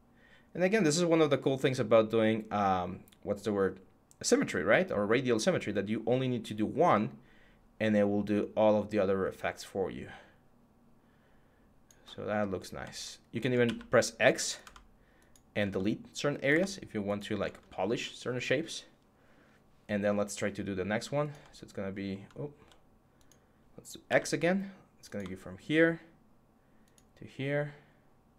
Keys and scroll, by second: 13.4 x, 22.3 z.